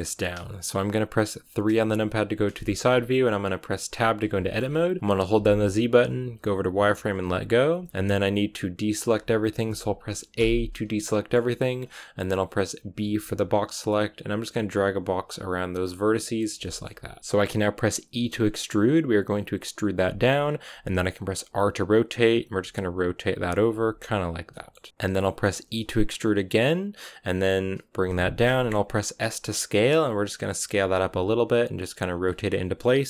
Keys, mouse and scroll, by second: 1.6 KP_3, 2.5 shift+middle click, 2.7-3.8 scroll up 6, 3.8 Tab, 4.3 shift+middle click, 4.5-7.1 scroll down 2, 7.1 z, 7.7-10.3 shift+middle drag, 10.3 a, 10.9-15.7 shift+middle drag, 15.7 b, 16.5-18.0 shift+middle drag, 18.0 e, 21.3 r, 22.5 g, 23.4 r, 23.7 g, 24.4 shift+middle click, 24.9 KP_3, 25.5 e, 28.4 shift+middle click, 28.9 s, 30.5 r, 30.9 g, 31.7 r.